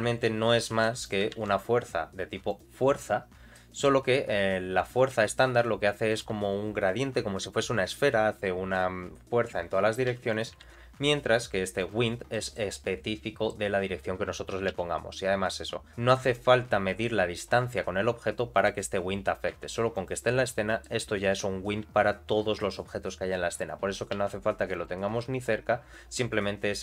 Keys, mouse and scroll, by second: 1.3 shift+a, 3.5 middle click, 4.0 g, 8.7-9.9 middle drag, 10.1 x, 10.6 shift+a, 12.3 middle click, 13.1 middle click, 14.7 g, 18.9-19.7 scroll down 3, 19.5 g, 20.4 middle click.